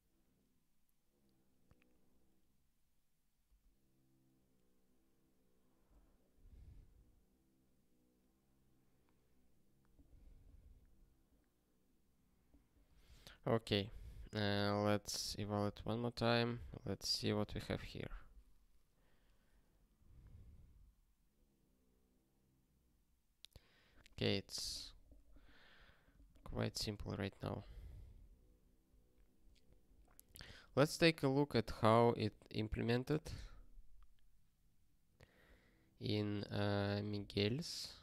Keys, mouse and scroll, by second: 13.6 super+o, 15.7 ctrl+k, 16.6 ctrl+p, 18.6-20.2 scroll down 1, 20.7-21.2 scroll up 1.